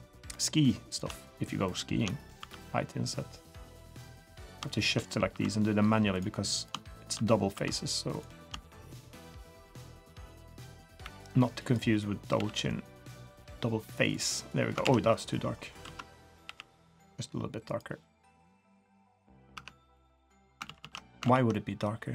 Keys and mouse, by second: 0.9 click, 2.4 i, 4.4 click, 4.7 shift+click, 5.3 i, 6.5 click, 7.5 i, 10.1 shift+click, 10.5 middle click, 11.0 e, 12.3 g, 14.0 click, 14.8 ctrl+z, 15.8 ctrl+z, 16.4 g, 18.6 middle click, 19.5 Tab, 19.9-20.5 middle drag, 20.6 ctrl+z, 20.8 ctrl+z, 21.4 ctrl+z, 21.5 drag.